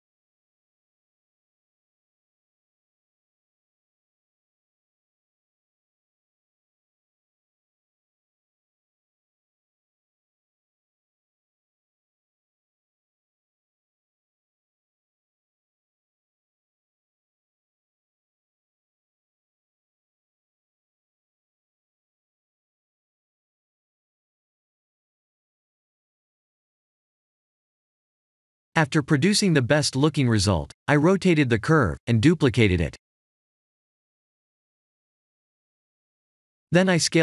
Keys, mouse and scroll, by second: 2.1 click, 6.5 click, 8.3-9.3 scroll up 2, 9.3 click, 9.3 scroll up 1, 17.6-19.9 scroll down 7, 20.0-21.0 scroll down 1, 21.0 click, 21.5 click, 23.4-24.3 scroll up 7, 25.9 click, 30.8 click, 31.2 Tab, 31.5 click, 32.4 KP_1, 33.5-33.9 scroll down 3, 34.0 r, 36.3 scroll up 4, 36.9 s.